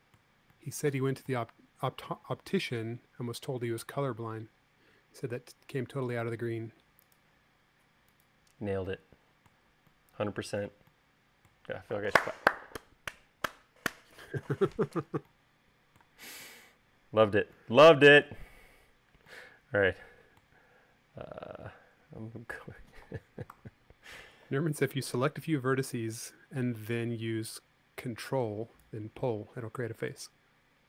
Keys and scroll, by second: 24.4 v.